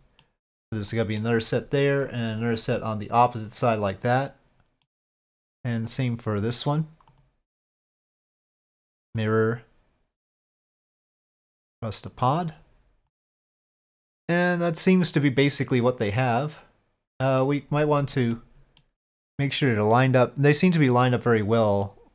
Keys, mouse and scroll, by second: 0.9 middle drag, 2.8-4.8 middle drag, 5.9 click, 7.1 click, 7.6 click, 7.9-9.2 drag, 10.3 click, 11.1-12.2 drag, 13.1 click, 13.5-17.4 middle drag, 18.3-18.8 middle drag, 21.3 click, 21.8 middle click.